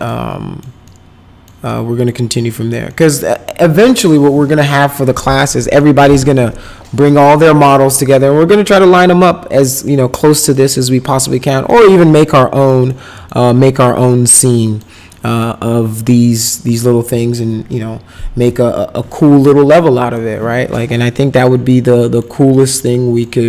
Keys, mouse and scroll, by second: 0.1 middle click, 0.9 middle click, 1.7 middle click, 2.3 middle click, 2.9 middle click, 5.8 middle click, 10.1 middle click, 10.5 middle click, 11.5 middle click, 12.2 middle click, 12.9 middle click, 13.5 middle click, 14.5 middle click, 15.1 middle click, 20.1 middle click, 21.0 middle click, 21.7 middle click, 22.8 middle click.